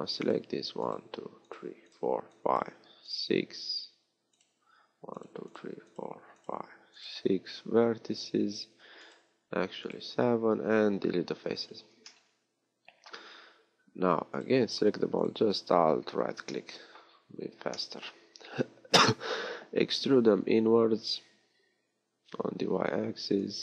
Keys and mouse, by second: 20.2 e.